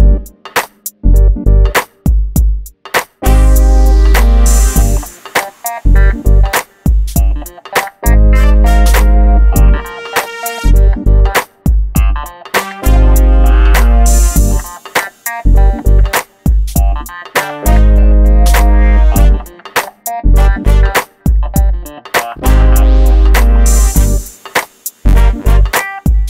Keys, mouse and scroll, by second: 0.9 m, 2.1 ctrl+click, 6.2 shift+click, 7.7 middle click, 8.1 scroll down 1, 9.2 click, 9.5 middle click, 9.7 scroll down 1, 10.6 middle click, 11.3 scroll up 1, 12.1 scroll down 1, 14.4 m, 14.9 click, 16.6 middle click, 17.5 click, 20.3-20.7 shift+scroll up 2, 21.2 shift+click, 21.5 scroll down 1, 22.7 middle click, 24.0 scroll down 1, 24.6 middle click, 26.0 scroll down 1, 26.1 shift+middle click.